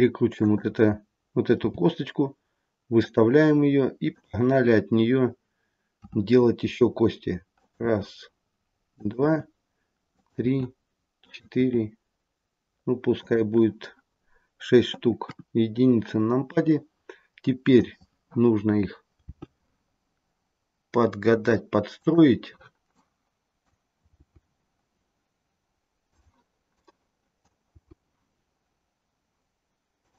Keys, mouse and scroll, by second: 1.5 g, 4.1 click, 6.0 e, 7.8 e, 10.4 e, 11.6 e, 15.1 KP_1, 16.4 click, 19.2 g, 22.9 click, 24.1 g, 26.6 click, 27.7 g.